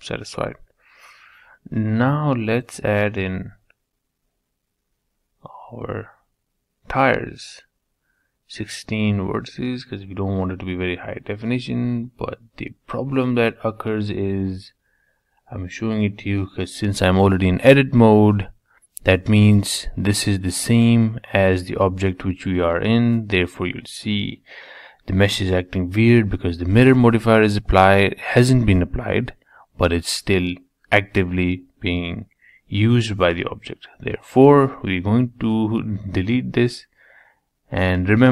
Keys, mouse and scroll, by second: 0.6-2.3 middle drag, 2.3 shift+a, 4.4-5.7 middle drag, 5.7-8.1 drag, 8.1 Tab, 8.7 click, 9.7 Tab, 13.2-15.1 middle drag, 15.5 g, 17.5 r, 21.1-22.9 middle drag, 24.1-25.8 middle drag, 25.8 l, 26.1 l, 26.7 Escape, 28.0 click, 28.9 3, 29.3 click, 30.3 Tab, 30.7 middle click, 31.6 Tab, 31.8 middle click, 32.5 click, 33.5-35.3 middle drag, 35.8 middle click, 36.6 ctrl+z, 36.8 ctrl+z, 37.1 ctrl+z, 37.4 ctrl+z, 37.6 ctrl+z, 37.9 ctrl+z, 38.1 ctrl+z.